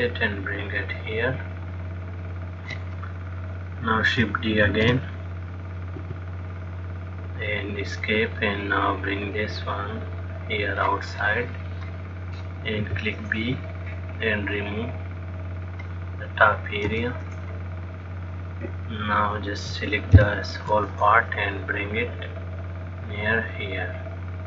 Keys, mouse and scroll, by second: 5.5 shift+d, 7.6 click, 12.0 click, 13.1 b, 17.1 x, 18.9 click, 20.5 ctrl+l, 22.4 click.